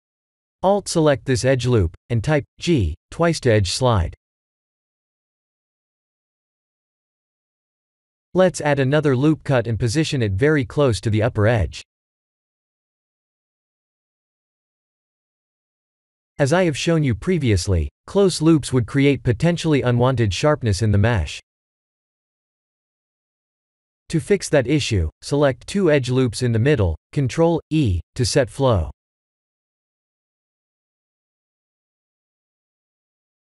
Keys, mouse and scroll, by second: 0.4 alt+click, 1.3 g, 5.0 scroll down 2, 5.4 middle click, 5.5 middle click, 5.6 middle click, 5.9 middle click, 6.3 middle click, 6.7 middle click, 7.3 ctrl+r, 9.9 Tab, 10.4 middle click, 23.2 Tab, 23.6 middle click, 24.0 middle click, 24.9 middle click, 26.5 alt+shift+click, 27.2 middle click, 27.9 middle click, 28.2 ctrl+e, 32.0 click.